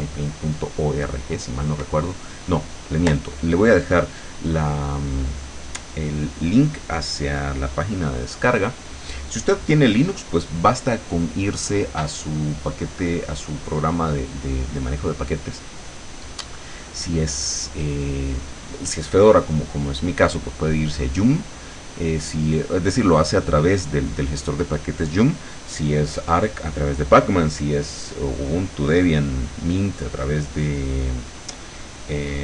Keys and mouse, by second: 29.3 click, 29.9-32.4 drag.